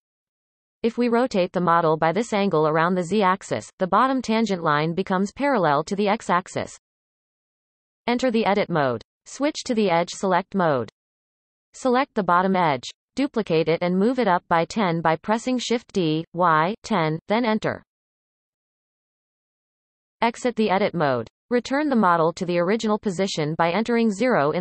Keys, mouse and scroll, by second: 1.3 r, 8.0 Tab, 10.4 click, 11.6 click, 13.0 shift+d, 20.0 Tab, 22.1-24.6 drag.